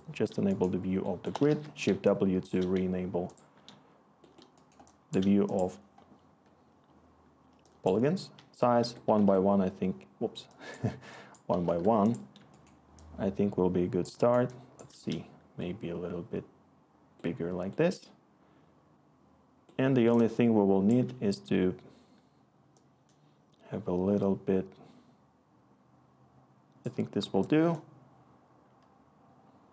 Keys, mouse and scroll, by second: 1.4 shift+w, 8.3 1, 8.8 Tab, 9.1 1, 9.2 Tab, 11.7-13.5 Tab, 13.5-14.9 Tab, 20.4-21.1 click.